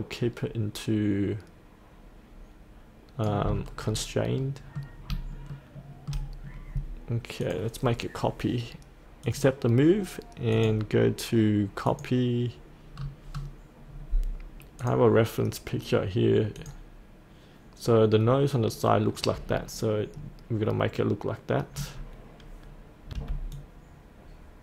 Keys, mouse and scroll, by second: 3.7-4.3 scroll up 1, 4.3 middle click, 5.2 shift+scroll up 1, 5.5 shift+middle click, 7.4 click, 12.9-13.3 scroll down 1, 13.8 scroll up 1, 14.8 click, 19.6-23.1 scroll up 1, 23.1 F8, 23.5-24.6 drag.